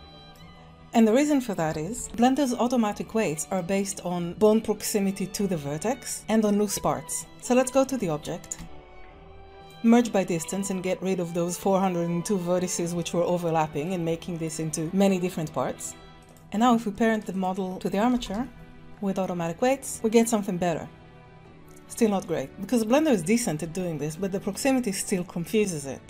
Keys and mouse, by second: 0.9 click, 1.9 shift+g, 2.2-3.5 drag, 6.1 Tab, 6.8 Tab, 7.7 Tab, 8.0 a, 8.5 q, 13.0 click, 16.2 Tab, 18.1 ctrl+p, 19.5 ctrl+Tab, 19.9 g, 22.4 middle click, 23.8-24.1 shift+drag, 24.5 middle click.